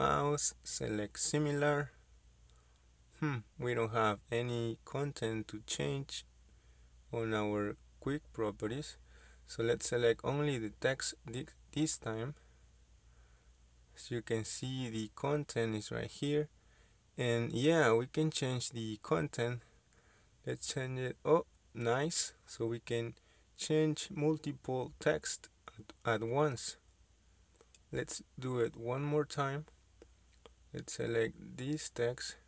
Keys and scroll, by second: 8.7 Escape, 18.4 BackSpace, 19.0 Return, 28.0 Escape, 31.3 Escape.